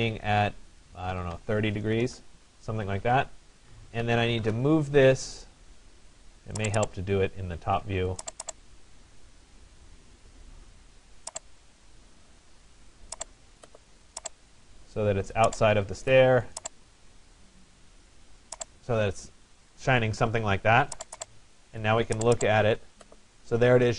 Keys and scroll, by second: 0.8 3, 1.4 0, 2.1 Return.